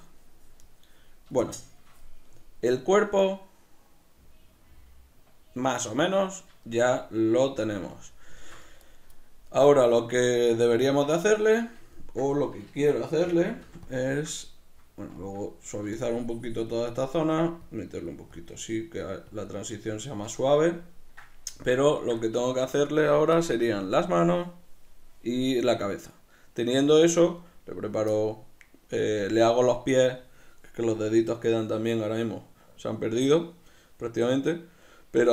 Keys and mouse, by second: 13.3 g, 14.1 click, 14.1-16.1 ctrl+middle drag, 16.1 shift+click, 16.9 middle click, 17.7-18.8 drag, 18.8 middle click, 19.4 click, 19.9-35.3 middle drag, 22.6 Tab.